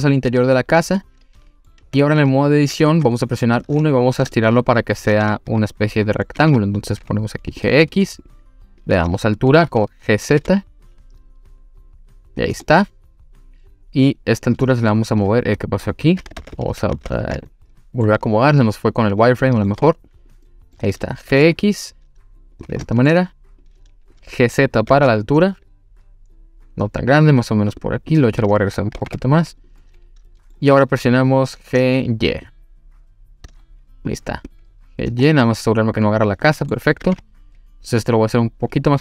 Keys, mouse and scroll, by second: 0.7 click, 1.0-1.7 middle drag, 1.8 Tab, 2.2 click, 2.9 1, 3.3 click, 4.3 shift+middle click, 6.4 g, 7.5 click, 8.3 click, 10.3 g, 12.4 click, 12.6-14.6 middle drag, 15.3 middle click, 16.4 ctrl+z, 16.5 ctrl+z, 16.9 ctrl+z, 17.5 middle click, 19.1 click, 19.4 middle click, 20.1 click, 20.5 middle click, 21.2 g, 22.5 click, 22.9 shift+middle click, 23.6 click, 24.9 g, 27.7 click, 28.1 click, 28.9 g, 29.0 x, 29.6 click, 29.8 middle click, 32.0 shift+click, 34.5 click, 35.3-36.7 middle drag, 37.0 g, 37.1 y, 38.7 click.